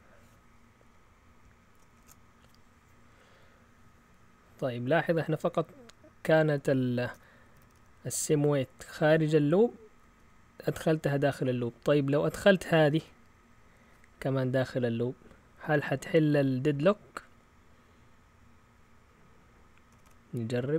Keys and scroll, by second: 1.9 shift+super+z, 7.4 Up, 7.6 Up, 7.7 Up, 8.3 Down, 9.0 Up, 10.0 Down, 12.1-12.9 typing, 20.0-20.4 typing.